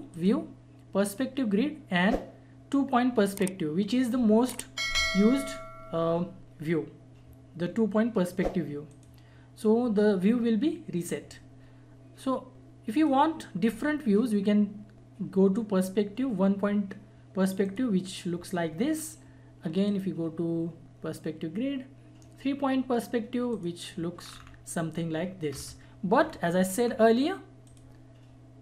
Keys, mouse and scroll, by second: 0.1 click, 0.1 click, 8.9 click, 12.9 click, 17.6 click, 23.5 click, 24.2 scroll down 1, 25.5 scroll up 1, 26.8 scroll down 1, 27.6 click.